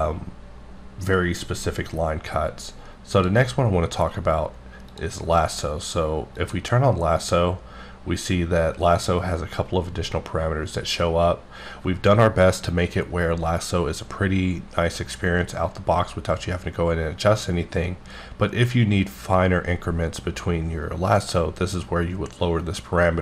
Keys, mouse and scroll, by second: 3.1 click, 4.8 click, 6.4 click.